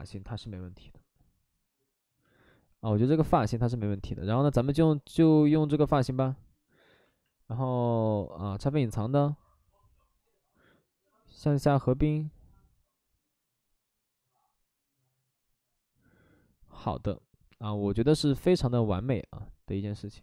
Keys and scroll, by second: 0.0 alt+s, 6.0 alt+s.